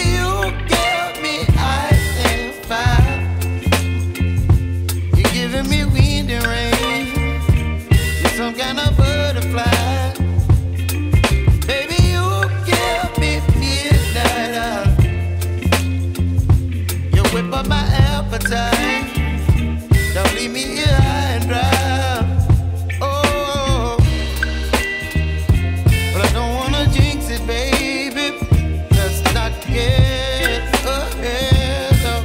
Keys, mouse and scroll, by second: 1.3-6.7 drag, 6.7-9.7 middle drag, 15.9 g, 18.2 KP_0, 20.1-23.1 drag, 23.7 ctrl+s, 26.3 click, 28.2 Delete, 30.2 click, 32.1 r.